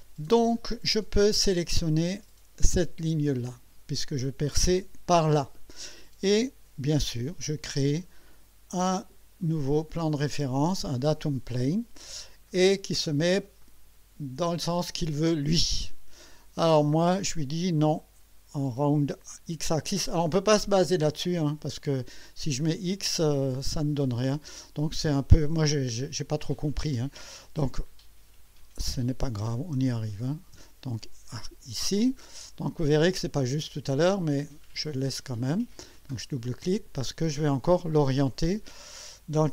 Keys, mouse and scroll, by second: 2.6 click, 9.5 click, 12.6-13.2 scroll down 3, 13.6-15.6 drag, 27.3 click, 29.6 KP_9, 29.8 KP_0, 30.6 Return, 35.9 click.